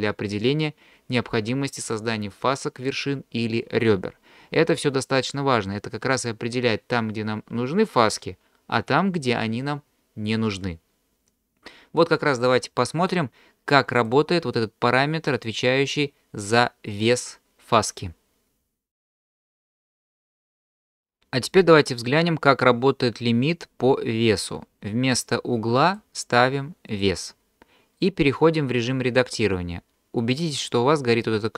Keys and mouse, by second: 14.1-18.9 drag, 20.8 ctrl+z, 25.8-27.0 drag.